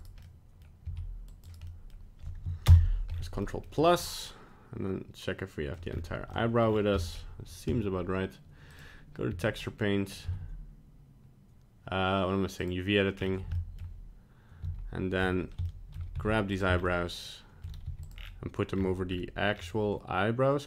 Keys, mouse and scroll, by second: 0.2 middle click, 0.8 c, 1.7 middle click, 2.6 ctrl+KP_Add, 3.1-3.4 scroll down 3, 3.4 middle click, 4.0 middle click, 5.7 middle click, 5.9-6.3 scroll up 3, 6.3 middle click, 6.6 scroll down 3, 7.0 middle click.